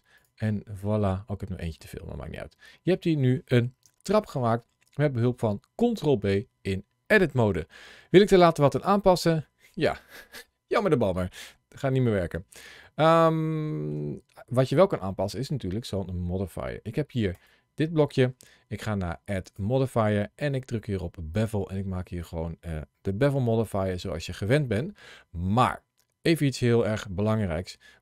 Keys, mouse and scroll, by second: 0.0 click, 1.6 middle click, 3.7 Tab, 4.1 middle click, 6.0-7.3 scroll down 2, 7.3-7.8 scroll up 1, 8.2 click, 8.6 click, 11.8 shift+middle click, 14.5 scroll down 1, 14.9 middle click, 17.2 click, 19.3 click, 22.9 scroll up 1, 23.4 shift+middle click, 24.3 middle click.